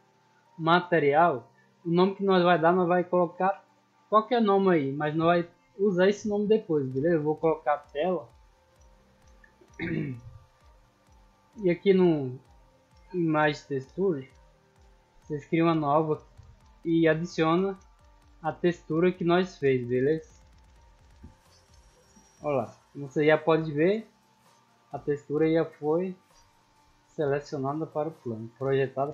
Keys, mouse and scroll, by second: 1.2 click, 2.8 click, 3.5 t, 4.1 a, 6.2 click, 9.1 scroll down 2, 9.4 scroll up 2, 9.6 scroll down 2, 9.9-11.0 scroll up 2, 11.3 click, 12.6 scroll down 2, 15.5 click, 18.4 click, 20.3 click, 21.9 middle drag, 22.5 shift+middle drag, 22.9 scroll up 1, 23.3-25.1 middle drag, 25.6-26.0 shift+middle drag, 26.2 scroll down 1, 26.7-27.1 middle drag.